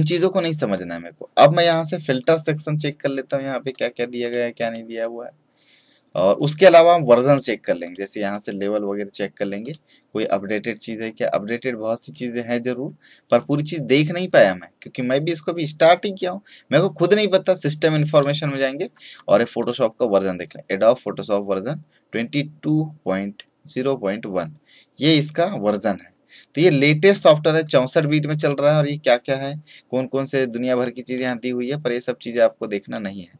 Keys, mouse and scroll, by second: 1.6 click, 7.8 click, 18.1-33.3 drag.